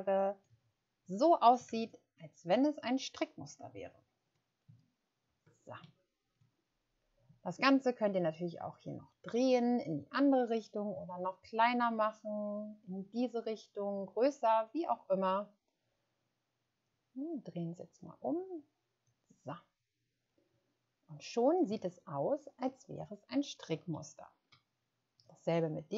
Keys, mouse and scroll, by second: 1.6 ctrl+0, 3.4-4.0 scroll up 2, 4.6 ctrl+scroll up 4, 5.8 shift+scroll down 1, 22.8-23.2 ctrl+scroll down 1, 23.8 space.